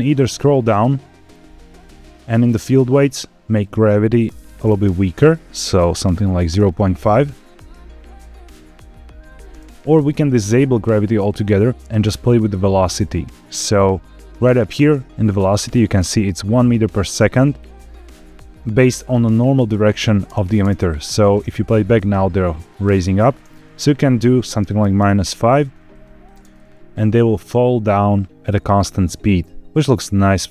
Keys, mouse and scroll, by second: 2.3 click, 2.9-3.5 scroll down 1, 3.5-4.8 drag, 6.1 click, 6.4 space, 7.2 scroll down 2, 8.4-8.8 scroll up 2, 9.5 space, 10.0 click, 11.3 click, 11.8-12.4 scroll up 4, 12.8-14.2 scroll up 4, 14.2-14.7 scroll up 2, 16.6-17.4 scroll down 4, 17.5 shift+middle click, 17.9-19.9 scroll up 3, 20.1 space, 20.5 space, 20.9 drag, 21.4 space, 23.3 space, 23.6-24.9 drag, 25.9 drag, 26.2 space, 27.7 scroll up 1, 28.1-28.5 shift+middle drag, 30.0 scroll up 1.